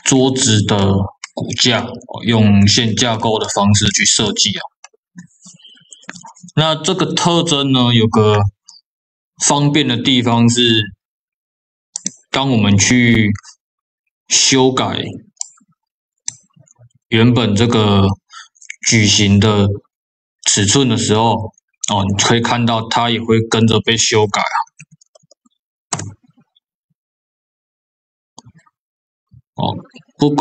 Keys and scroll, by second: 24.9 KP_0, 25.8 Return.